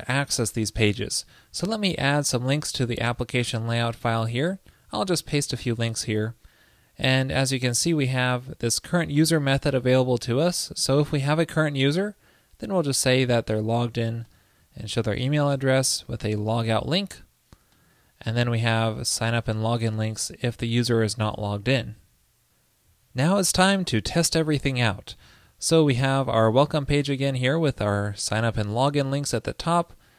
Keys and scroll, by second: 4.7 super+v, 21.4 super+s.